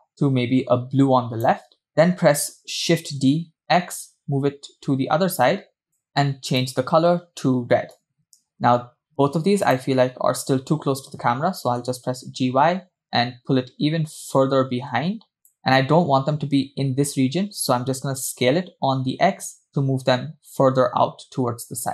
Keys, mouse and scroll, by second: 3.0 shift+d, 6.9 click, 9.8 shift+click, 11.8 g, 18.4 s.